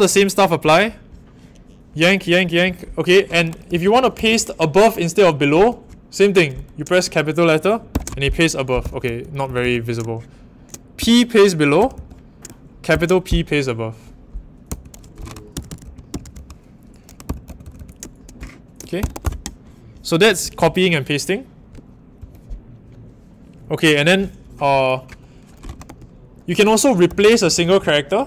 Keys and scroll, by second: 3.4-4.8 typing, 7.9-12.9 typing, 14.6-17.7 typing, 18.7-19.6 typing, 22.1 shift+;, 25.4-28.2 typing.